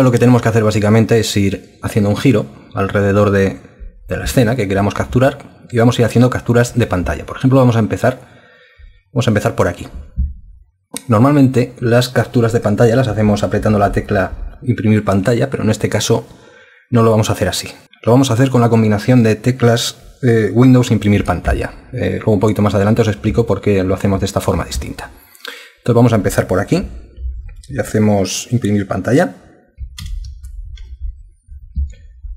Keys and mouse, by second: 30.0 super+Print.